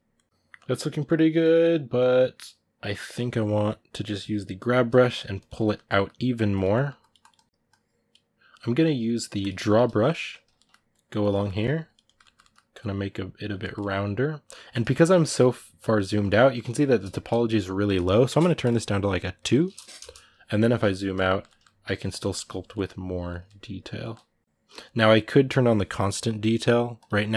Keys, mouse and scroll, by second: 4.0 g, 4.8 ctrl+middle click, 5.1 click, 5.3 middle click, 6.3 click, 6.5 middle click, 6.8-10.3 drag, 10.3 ctrl+middle click, 10.7 click, 11.1 ctrl+middle click, 11.3 click, 11.8 middle click, 12.5 click, 13.4-21.6 ctrl+middle drag, 21.6 click, 22.0 ctrl+middle click, 22.2 click, 22.5 middle click, 22.8 click, 23.2 ctrl+middle click, 24.2-27.3 drag.